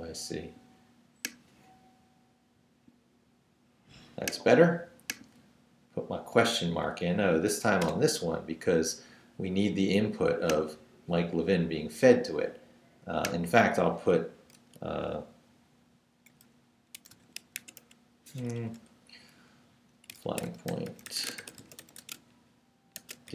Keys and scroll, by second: 6.6 Down, 7.3 shift+Down, 7.5 shift+/, 7.8 shift+Return, 8.7 Return, 16.9-18.4 typing, 20.0-23.3 typing.